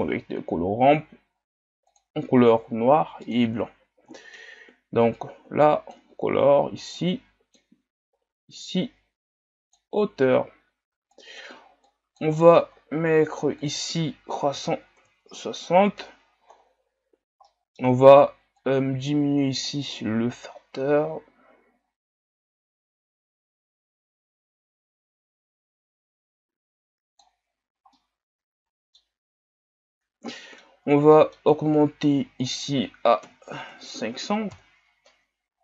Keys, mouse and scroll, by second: 3.6-5.9 drag, 7.0-7.5 drag, 8.6-9.9 drag, 10.3-11.1 scroll down 1, 11.1-16.5 drag, 16.5-17.5 scroll up 8, 18.7-22.3 drag, 27.6-28.0 scroll down 2, 28.0-29.1 middle drag, 29.1-30.5 scroll up 6, 34.6 KP_0.